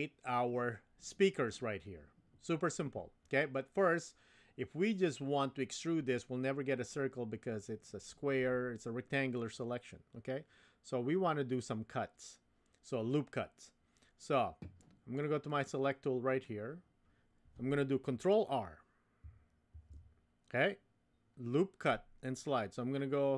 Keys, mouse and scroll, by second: 15.5 click, 19.7 ctrl+r.